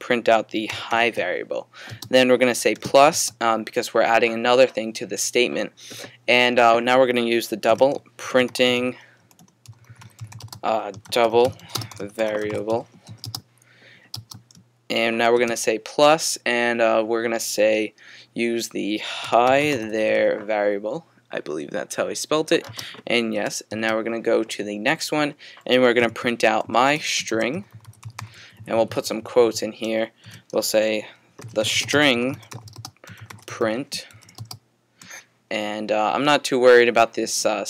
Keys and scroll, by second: 0.7-1.4 typing, 2.9 typing, 4.8 typing, 7.5-13.0 typing, 19.0-20.6 typing, 23.4 typing, 24.9-28.8 typing, 30.2-34.8 typing.